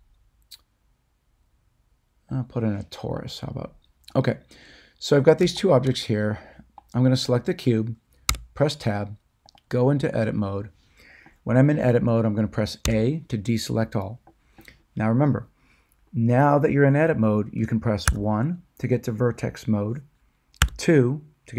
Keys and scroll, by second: 8.2 Tab, 12.8 a, 18.0 1, 20.6 2.